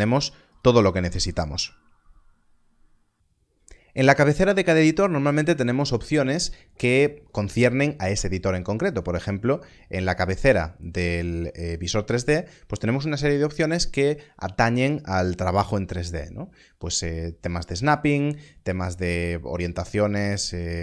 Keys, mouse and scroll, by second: 0.4 click, 19.5 click.